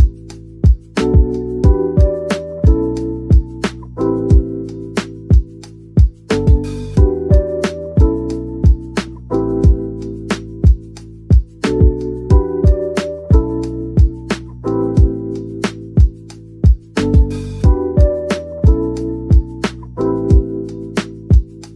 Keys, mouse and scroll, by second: 0.1 middle click, 1.3 typing, 4.1 typing, 5.8 typing, 8.5-9.4 typing, 11.3-11.6 typing, 14.2 middle click, 15.7 scroll up 1, 16.0 middle click, 17.0 Tab, 18.4 ctrl+t, 18.6 ctrl+z, 19.1 ctrl+r.